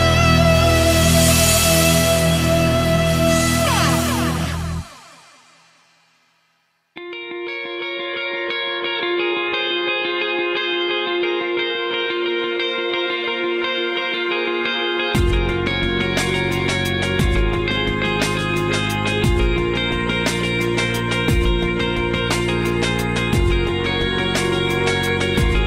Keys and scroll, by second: 3.0 space, 3.4 ctrl+z, 3.6 ctrl+z, 3.8 ctrl+z, 6.4 space, 8.2 ctrl+z, 8.4 space, 20.0 space, 20.8 ctrl+z, 25.2 space, 25.5 space.